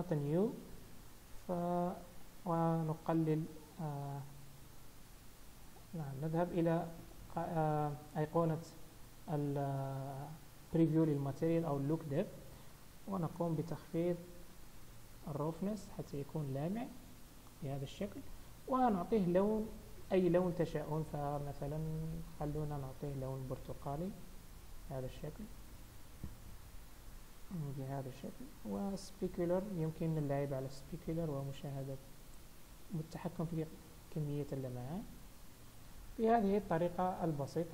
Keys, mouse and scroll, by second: 0.1-2.0 scroll down 6, 2.3-4.0 scroll down 2, 4.0 click, 14.1 click, 16.8 middle click, 36.5 scroll down 3, 36.5 KP_0, 37.4-37.7 scroll down 3.